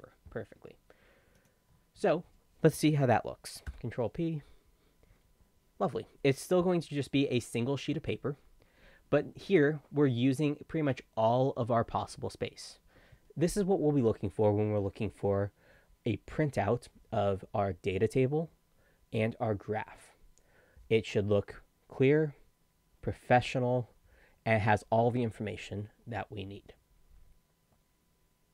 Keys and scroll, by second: 3.6 ctrl+p.